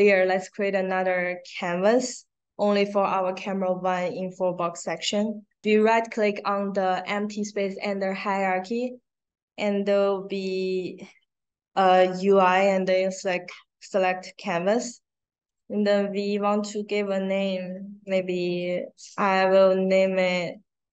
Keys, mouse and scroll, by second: 14.1 click, 15.4 click, 16.5 click, 19.3 a, 20.8-20.9 typing.